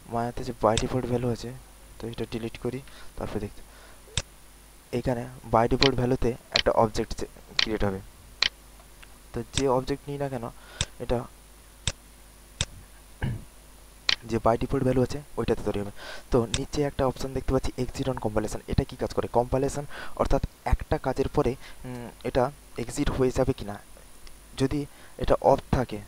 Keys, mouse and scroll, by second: 0.7-1.7 drag, 3.0 Delete, 4.1 click, 5.0-5.3 scroll up 2, 5.5 alt+middle click, 6.2 alt+middle click, 6.5 alt+right click, 7.0 alt+middle click, 7.5 alt+right click, 8.0 alt+middle click, 8.4 alt+right click, 9.5 click, 11.3 alt+right click, 11.8 alt+right click, 12.5 click, 13.5 alt+middle click, 14.0 alt+right click, 14.4 alt+middle click, 16.4 click.